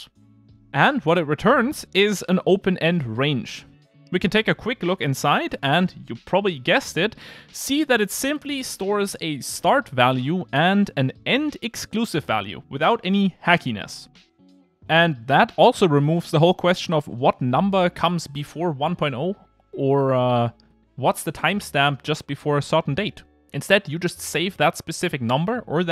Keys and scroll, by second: 5.1 super+b.